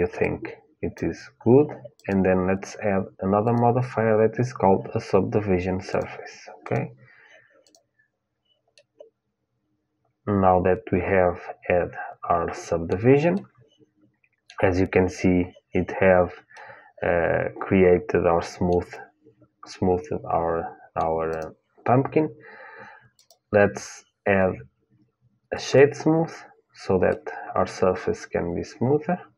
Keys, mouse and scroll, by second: 1.7-4.0 drag, 5.6-9.4 drag, 8.5 middle click, 9.4-10.5 middle drag, 13.1-15.7 middle drag, 16.3-18.4 middle drag, 19.4-21.0 middle drag, 21.0-25.2 drag, 26.8-28.8 middle drag.